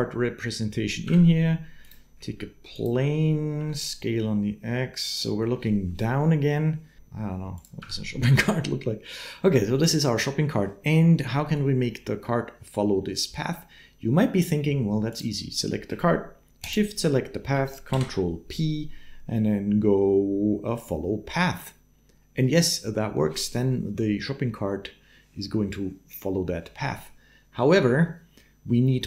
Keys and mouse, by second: 0.9 Tab, 2.6 shift+click, 3.4 s, 6.8 s, 7.6 Tab, 17.7 ctrl+p.